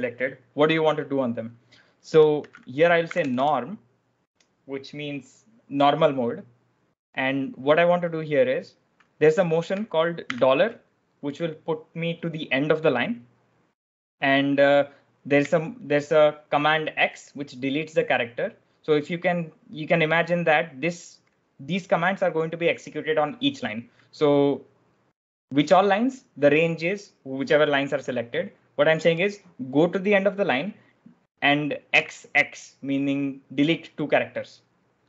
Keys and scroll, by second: 2.0-3.6 typing, 10.1 shift+4, 15.3 x, 31.8 x.